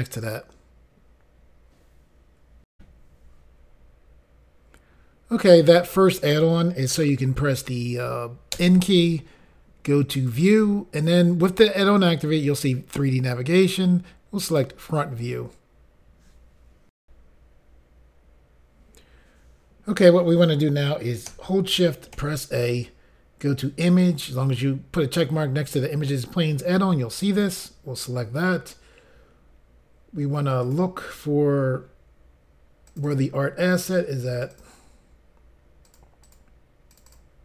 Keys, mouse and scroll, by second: 0.2 click, 2.7 Insert, 10.1 click, 13.5 click, 14.5 click, 17.0 Insert, 18.0 Pause, 27.3 click, 30.6 click, 31.8 scroll down 2, 32.9 click, 33.1 click, 34.3 click, 34.5 click, 35.8 click, 36.2 click, 36.9 click, 37.1 click.